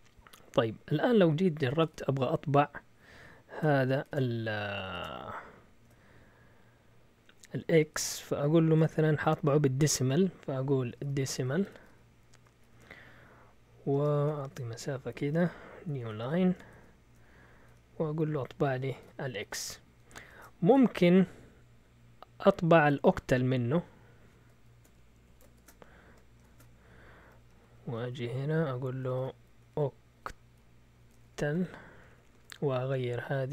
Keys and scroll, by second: 1.4-4.8 typing, 10.7-12.6 typing, 13.9-19.0 typing, 20.1-21.2 typing, 25.1 Escape, 25.5-26.8 typing, 27.2 Right, 27.3 Right, 27.5 Right, 27.7 Right, 27.8 Right, 28.0 Right, 28.1 Right, 28.3 Right, 28.8-31.7 typing, 31.9 Right, 32.1 Right, 32.2 Right, 32.3 Right.